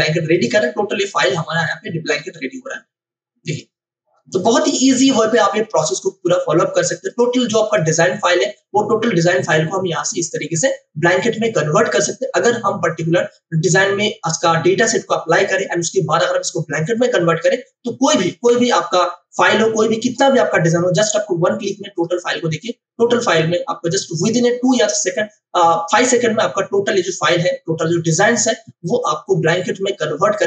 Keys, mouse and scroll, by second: 3.4 click, 7.0 click, 21.9 click, 30.3 click.